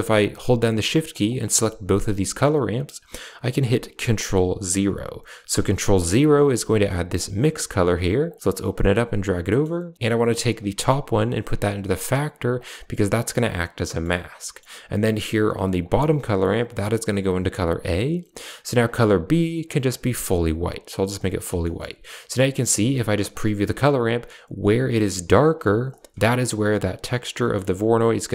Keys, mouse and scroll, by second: 0.3 click, 1.2 shift+click, 5.4 ctrl+0, 7.1 click, 8.2 click, 8.6 click, 9.4 middle click, 10.3 click, 11.4-12.1 drag, 12.5 click, 14.4 middle click, 15.7 click, 17.1-18.0 drag, 18.7 click, 21.6 shift+middle click, 22.4 middle drag, 23.2 ctrl+shift+click, 25.8 ctrl+shift+click, 27.3 middle click.